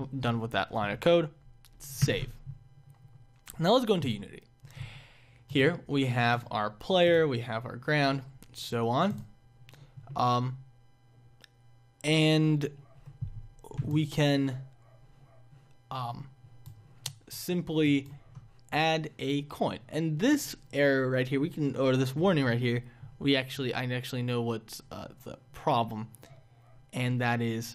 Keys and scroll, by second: 2.0 ctrl+s.